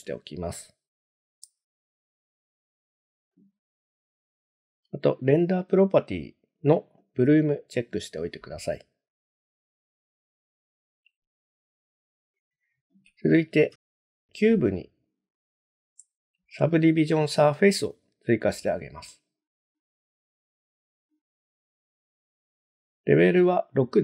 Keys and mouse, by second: 1.4 click, 5.7 click, 7.8 click, 10.5 click, 12.1 click, 13.3-13.6 shift+middle drag, 15.2-18.0 drag, 20.4 click, 21.4 click, 21.7 click, 22.2 click.